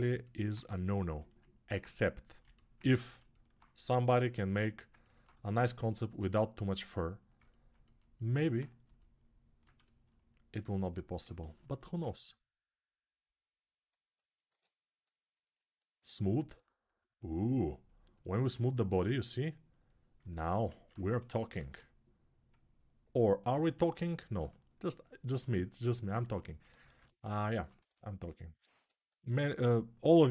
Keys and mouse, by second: 2.1-4.0 alt+right drag, 4.0-9.4 alt+shift+drag, 9.4-14.7 alt+shift+right drag, 14.7 ctrl+r, 14.7-17.0 ctrl+drag, 17.0-21.6 shift+right drag, 20.5 alt+q, 21.3 shift+r, 23.9 ctrl+r, 26.4-30.3 ctrl+drag, 26.6 ctrl+z, 29.8 x.